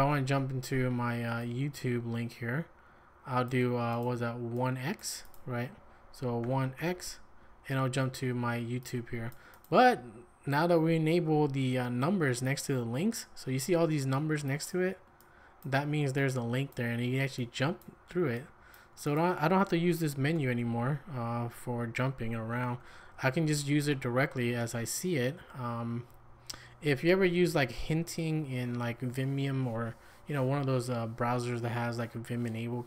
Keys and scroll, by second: 6.4 1, 6.8 x, 20.1 Escape, 20.3 m, 22.8 q.